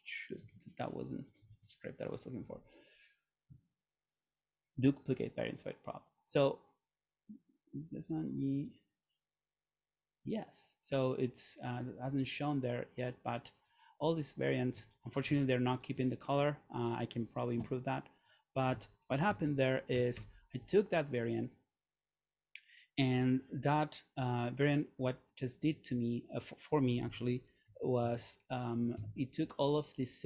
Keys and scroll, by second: 0.5 super+z, 1.6 super+z, 19.4 shift+f, 20.2 Return, 27.1 super+a, 27.7 1, 28.1 2, 28.8 8, 29.1 Return.